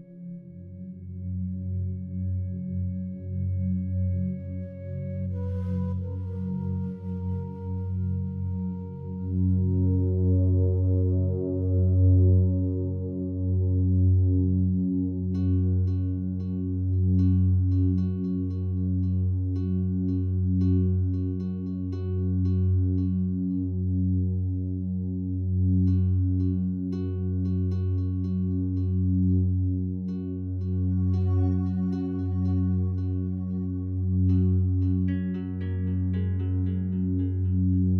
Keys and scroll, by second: 17.6-21.1 typing, 21.3 Return.